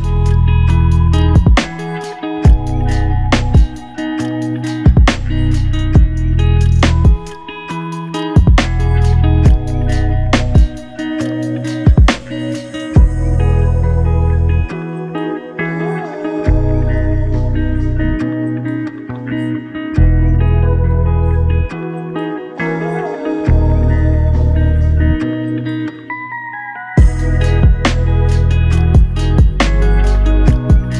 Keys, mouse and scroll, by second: 1.1 ctrl+z, 5.3 typing, 6.5 double click, 9.8-10.5 typing, 15.9 double click, 19.7 double click, 25.9 ctrl+alt+click, 27.2 double click, 29.4 f.